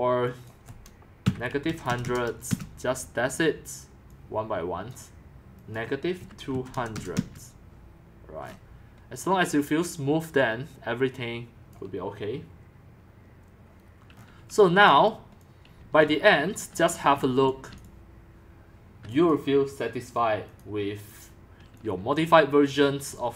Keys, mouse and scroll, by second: 0.0-2.4 typing, 0.4 click, 2.5 Return, 5.0-6.2 drag, 6.0-7.2 typing, 8.4-9.9 scroll down 6, 9.9-11.7 scroll down 1, 11.7-14.1 drag, 14.1-14.5 scroll up 5, 14.5 s, 14.9 click, 15.6-18.8 typing, 16.5 click, 16.9 scroll up 6, 17.1 middle click, 17.1 scroll, 17.8 click, 18.9-19.3 scroll down 19, 19.3-23.3 drag, 23.1 x.